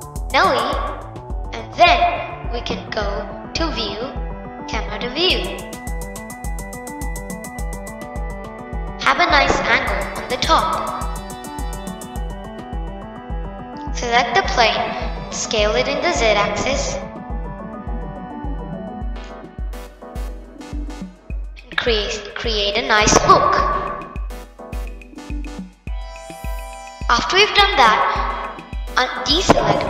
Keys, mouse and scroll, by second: 3.8 click, 5.1 click, 6.3-6.9 scroll down 2, 6.9-9.2 middle drag, 9.2-12.3 drag, 13.7 click, 15.2 s, 19.2-22.3 drag.